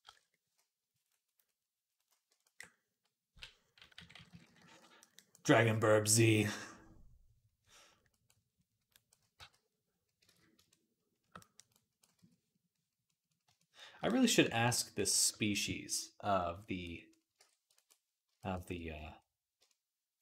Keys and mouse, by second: 2.3-4.4 ctrl+middle drag, 3.4-4.6 typing, 4.4 click, 7.5-8.8 drag, 9.2 v, 10.1 ctrl+z, 11.1-16.5 drag, 12.0 x, 15.0 ctrl+Tab, 17.2 ctrl+Tab.